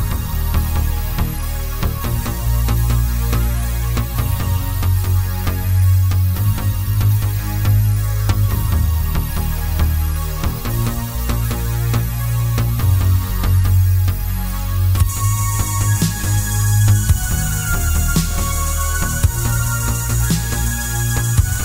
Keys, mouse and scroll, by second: 0.9 click, 1.1 g, 2.4 click, 2.5-4.9 middle drag, 3.0 KP_1, 3.5 g, 4.9 click, 6.1-9.3 middle drag, 8.1 s, 9.3 click, 10.0-13.3 middle drag, 13.3 click, 14.0-17.0 middle drag, 14.5 scroll up 1, 15.5 scroll up 1, 17.0 click, 17.3 Tab, 17.6 click, 18.9 ctrl+r, 21.4 s.